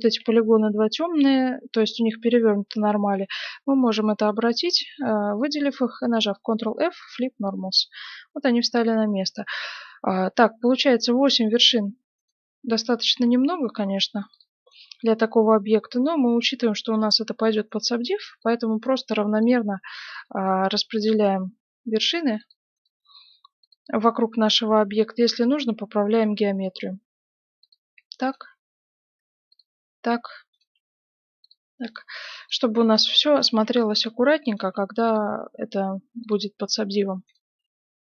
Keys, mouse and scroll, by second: 0.3 middle click, 2.0-3.9 middle drag, 4.1-6.0 middle drag, 6.0 ctrl+f, 8.7-10.5 middle drag, 12.1 right click, 13.1 g, 14.7-16.3 right drag, 14.8 g, 17.6-26.2 right drag, 17.8 g, 19.0 g, 20.3 g, 21.5 g, 22.9 g, 24.5 g, 26.5 right click, 26.7 g, 28.2 right click, 28.4 g, 30.5-38.0 right drag, 30.6 g, 32.0 g, 33.5 g, 34.6 g, 35.6 g, 37.3 g.